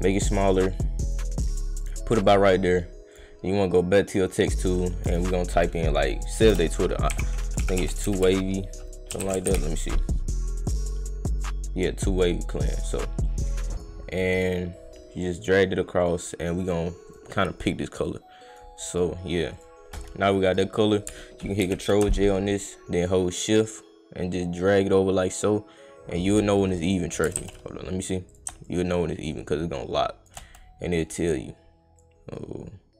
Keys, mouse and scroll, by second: 0.7 right click, 1.8 click, 2.2 click, 4.1 click, 6.8-9.8 typing, 10.6 click, 12.1 click, 13.2 click, 13.7 click, 13.7-16.0 right drag, 16.0 right click, 17.0 click, 17.3 click, 18.0 click, 18.9 click, 19.5 click, 23.6-26.5 shift+drag, 27.4 ctrl+z, 28.3 click, 28.6-30.2 shift+drag, 30.9 click, 32.0-32.9 drag.